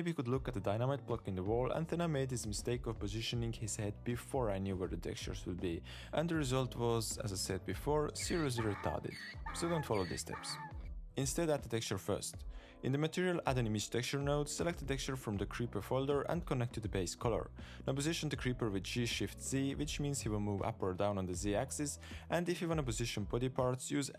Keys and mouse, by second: 0.0-4.0 typing, 0.0 click, 0.4 shift+drag, 0.9 shift+click, 1.6 middle click, 2.4 shift+middle click, 2.7 shift+middle click, 3.7 click, 3.7 Tab, 3.8 alt+a, 5.7 r, 7.4 r, 7.7 r, 12.1-13.2 drag, 12.8 e, 13.2 shift+a, 17.0-17.6 drag, 18.6 middle click, 18.9 g, 23.0 Tab.